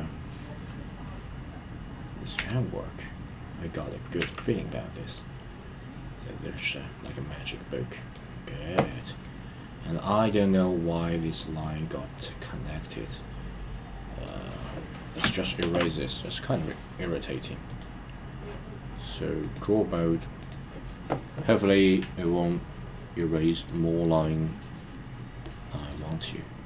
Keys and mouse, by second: 2.3 KP_3, 4.1 KP_1, 5.1-8.2 middle drag, 9.2-14.3 middle drag, 16.2 middle click, 17.6 click, 19.5-20.5 drag, 22.9 click, 24.2 click, 25.4 click, 26.3-26.6 middle drag.